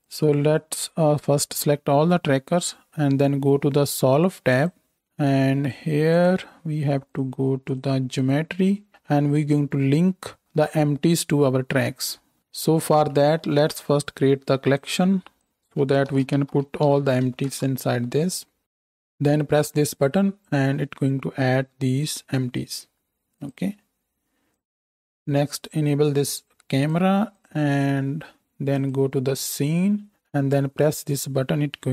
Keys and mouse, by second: 1.7 a, 4.7-6.1 middle drag, 6.1-18.3 drag, 12.4 ctrl+z, 18.3-20.5 middle drag, 20.5-23.5 drag, 23.5-24.6 middle drag, 24.6 click, 24.7-26.7 middle drag, 26.7-27.5 drag, 27.5-28.7 middle drag, 28.7-31.9 drag.